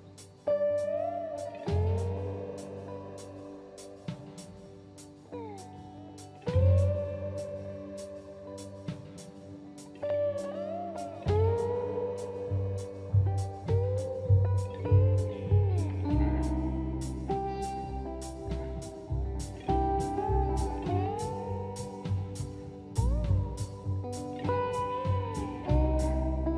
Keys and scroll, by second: 4.7-6.0 typing, 7.4 shift+Delete, 7.8 space, 23.6 m.